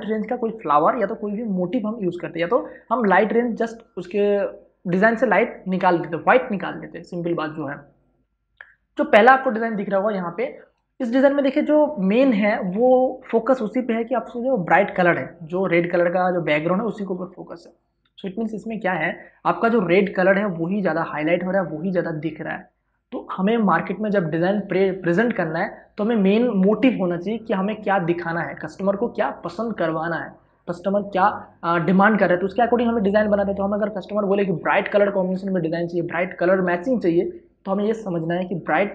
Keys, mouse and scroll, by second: 10.9 ctrl+space, 11.1 ctrl+click, 11.4 ctrl+space.